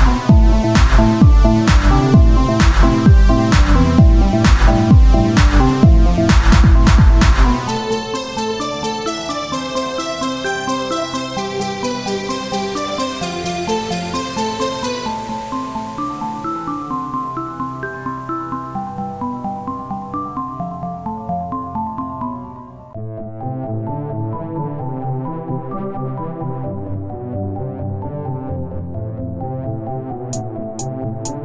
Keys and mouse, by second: 0.0 KP_3, 0.5 Tab, 0.9 right click, 1.4 z, 1.4 c, 4.3-9.1 drag, 4.5 r, 7.7 r, 8.1 z, 9.5-12.1 drag, 12.1 KP_3, 12.8 r, 14.4 KP_3, 14.8 z, 15.1 c, 16.7 r, 18.4-20.6 drag, 18.4 z, 20.0 r, 24.2-30.2 middle drag, 30.2 KP_3, 30.7 z, 31.2-31.4 drag.